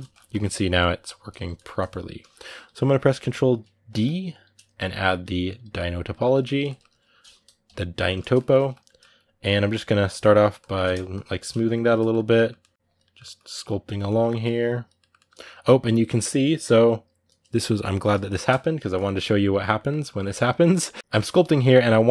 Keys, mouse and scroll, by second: 0.1 click, 1.0 ctrl+z, 1.3-7.4 middle drag, 7.4 KP_Decimal, 7.8-9.5 middle drag, 9.5 shift+click, 10.0 middle click, 10.3 shift+click, 10.6 middle click, 10.9 shift+click, 11.1 middle click, 11.5 shift+click, 11.7 middle click, 12.7 click, 12.8 middle click, 13.1 click, 13.3 middle click, 13.6 click, 13.8 middle click, 14.2 click, 14.8-21.0 middle drag, 21.0-22.1 drag.